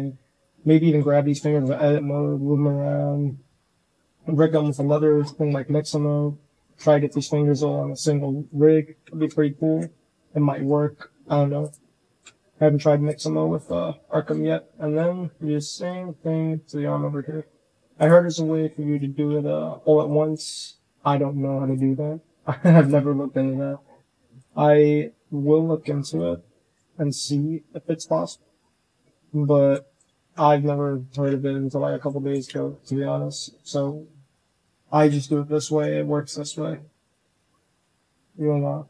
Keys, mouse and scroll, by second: 0.5-0.8 drag, 1.3 click, 1.7 click, 2.0-2.8 shift+drag, 3.5-4.6 middle drag, 4.6-5.6 drag, 5.6 middle drag, 6.3-6.6 middle drag, 7.7-8.3 middle drag, 8.9 shift+middle drag, 9.5 KP_1, 10.3 shift+middle click, 11.9 shift+drag, 12.5 r, 13.2-13.6 drag, 13.2-13.6 right drag, 14.0 click, 14.3 r, 15.7-16.4 drag, 16.3 right drag, 16.6 drag, 17.0 r, 18.1 middle click, 19.0 drag, 19.3-21.8 typing, 20.1 click, 22.9-23.3 drag, 23.6 g, 24.5 click, 25.0 g, 27.0 shift+click, 28.1 z, 28.5 click, 28.8 c, 29.5 click, 29.8 z, 30.0 shift+drag, 31.0 z, 31.2 c, 32.0 click, 32.3 z, 33.7-35.6 typing, 37.2 click, 37.6 shift+click, 37.6 shift+right click, 38.3 click, 38.7 shift+click.